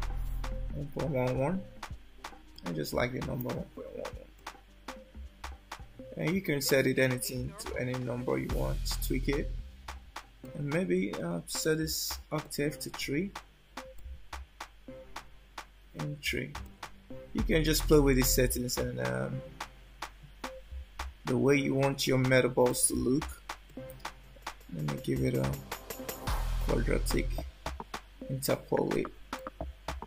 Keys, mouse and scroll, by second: 0.9 1, 4.5 shift+middle click, 10.7 click, 14.1 click, 18.0 shift+middle click, 22.8 click, 23.8 click, 29.5 shift+middle click.